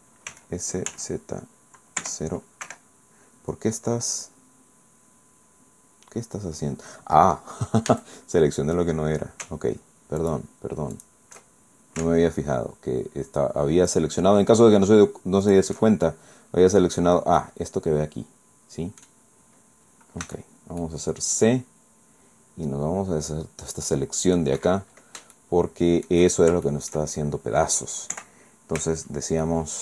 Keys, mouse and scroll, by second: 0.3 s, 0.9 z, 2.0 KP_0, 2.7 Escape, 3.8-4.2 scroll down 2, 4.4-4.8 scroll down 2, 5.2-5.8 scroll up 2, 6.2 scroll down 2, 6.8-7.2 scroll up 2, 7.2-7.5 scroll down 2, 7.9 a, 8.2 scroll up 2, 10.2 alt+shift+right click, 11.0 alt+shift+right click, 11.4-11.8 alt+shift+scroll up 2, 13.9 alt+shift+right click, 15.4 alt+shift+right click, 15.8-16.6 alt+shift+scroll down 4, 17.4-19.1 drag, 19.1 middle click, 19.2 scroll down 2, 20.2 c, 20.8-24.6 drag, 24.6 Escape, 25.4 shift+click, 26.3 shift+scroll down 2, 26.6 shift+click, 28.2 KP_1, 29.4 shift+click.